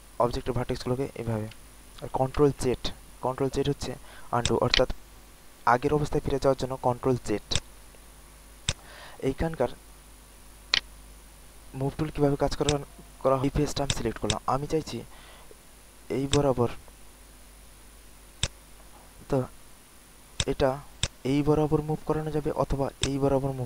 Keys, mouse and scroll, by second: 1.6 ctrl+z, 2.4 typing, 4.3 alt+click, 4.7 alt+right click, 5.2 alt+middle click, 7.4 alt+click, 7.8 alt+middle click, 8.6 click, 9.2 alt+middle click, 9.6 alt+middle click, 10.6-12.0 right drag, 12.6 click, 13.8 click, 14.2 alt+click, 16.2 click, 20.3 alt+click, 20.9-23.6 drag.